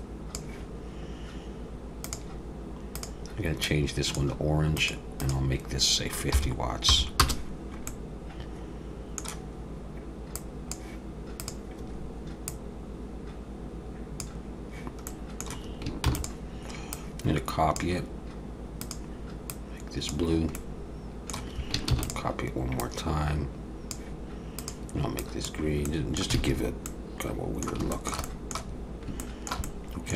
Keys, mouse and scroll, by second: 4.8 click, 7.9 middle click, 10.3 click, 11.4 click, 15.1 middle click, 16.1 shift+d, 16.9 click, 18.8 click, 20.6 middle click, 21.9 shift+d, 22.8 click, 24.6 click, 25.9 middle click, 26.4 alt+a, 26.6-26.9 scroll up 3, 26.9 middle click, 27.9 shift+middle click, 28.3 middle click, 28.8 scroll up 2, 29.2 shift+middle click, 29.6 middle click.